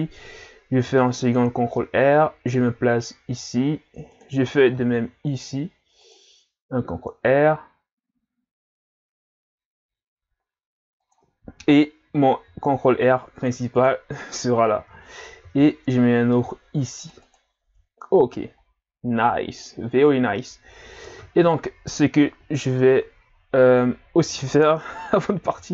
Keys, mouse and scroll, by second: 0.8 ctrl+r, 4.7 ctrl+r, 12.5 ctrl+r, 15.4 ctrl+r, 18.1-19.4 scroll down 1, 21.0 Tab, 22.7 Tab, 25.5 ctrl+r.